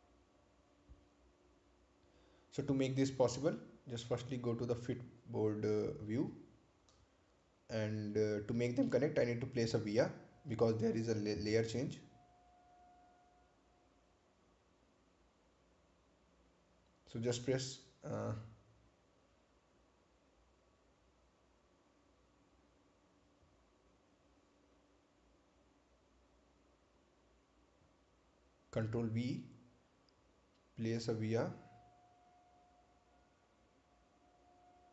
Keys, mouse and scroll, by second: 4.5 click, 8.5 scroll up 1, 18.7-19.3 scroll up 1, 19.3 ctrl+c, 20.3 click, 24.8 click, 28.8 click, 30.5 ctrl+v.